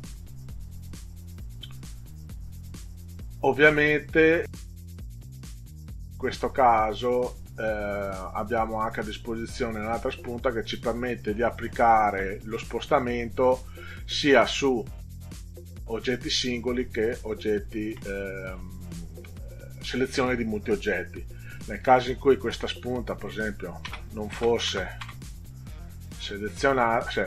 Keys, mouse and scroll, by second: 0.7 click, 23.3-25.5 drag, 23.9 space, 26.3 click.